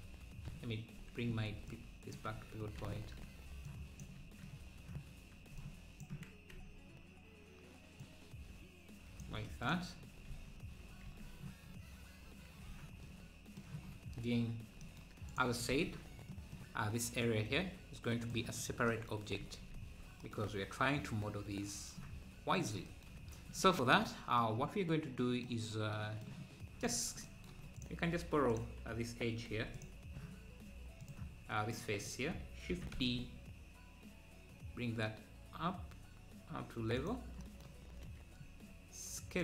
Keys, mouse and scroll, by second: 0.9 ., 2.3 ctrl+z, 2.6 scroll down 1, 4.0 click, 6.0 shift+click, 6.8 z, 8.1 click, 10.0-11.1 scroll down 1, 11.5 scroll down 3, 13.9 scroll down 2, 14.5 scroll up 1, 15.4 click, 21.2-21.7 scroll down 2, 23.2 scroll up 3, 26.9 click, 27.9 click, 28.2 Tab, 28.6 click, 31.1-32.1 drag, 32.7 shift+d, 38.0-38.4 scroll up 1.